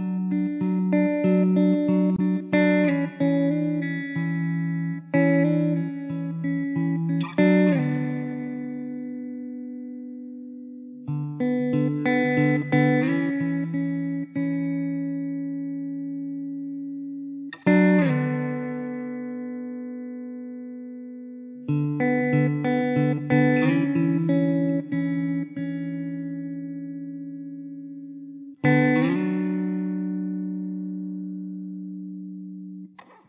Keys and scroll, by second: 0.6 l, 0.7 l, 1.9 x, 3.5 ctrl+z, 3.6 ctrl+z, 6.1 alt+z, 6.1 alt+z, 6.6 l, 6.8 l, 7.2 x, 8.8 Tab, 9.2 alt+z, 10.5 shift+d, 11.5 r, 13.3 ctrl+z, 13.7 r, 15.0 `, 17.2 alt+z, 18.7 alt+z, 20.0 Tab, 20.8 Tab, 21.6 s, 22.7 alt+z, 24.6 alt+z, 27.1 alt+z, 27.9 ctrl+z, 28.1 ctrl+z, 32.0 alt+z.